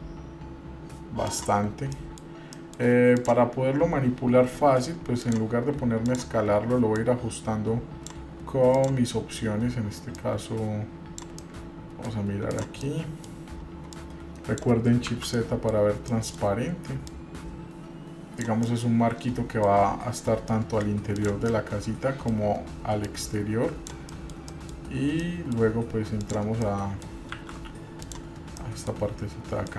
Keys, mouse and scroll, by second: 1.8-2.2 scroll up 2, 2.1 middle click, 2.7 middle click, 3.3 click, 5.4 click, 6.2 click, 7.2-8.3 drag, 8.9 click, 10.4-11.4 drag, 11.6 middle click, 12.7 click, 13.0 middle click, 14.1 click, 15.4 shift+z, 15.6 middle click, 16.2 scroll up 1, 16.3 middle click, 17.3-18.6 drag, 18.9 middle click, 20.7 middle click, 21.3 click, 21.7 middle click, 23.3 click, 24.3 middle click, 24.3 scroll down 1, 24.7 middle click, 25.2 scroll up 2, 25.4 middle click, 26.4 click, 26.8 middle click, 27.6 shift+z, 28.2 click, 28.8 middle click.